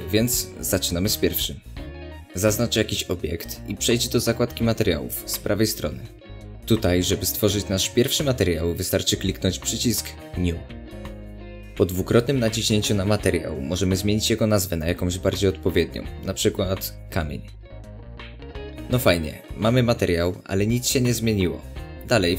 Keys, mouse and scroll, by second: 0.6 scroll up 1, 0.8-4.9 middle drag, 4.9 click, 10.6 click, 13.5 click, 13.7-22.3 drag, 18.3 Return.